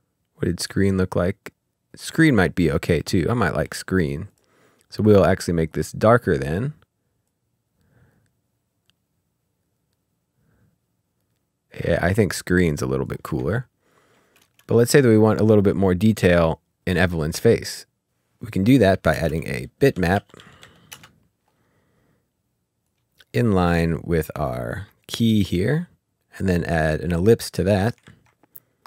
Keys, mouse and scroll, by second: 4.0 scroll up 1, 4.3 click, 7.2 click, 13.5 ctrl+scroll up 1, 14.0 scroll up 1, 14.4 space, 17.4 click, 18.0 Delete, 18.4 click, 19.1 ctrl+space, 19.9-20.8 typing, 20.9 Return, 22.8 click, 25.0 click, 28.0 ctrl+z.